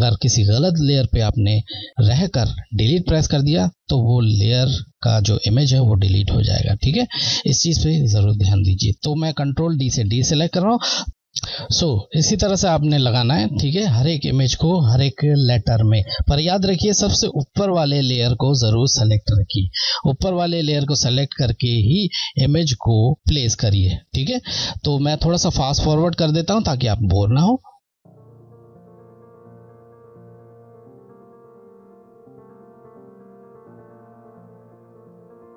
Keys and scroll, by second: 7.1 scroll, 10.1 ctrl+d, 28.1 Left, 30.0 Left, 30.3 Right, 30.8 Left, 33.0 ctrl+t, 33.3 shift+Left, 34.4 shift+Left.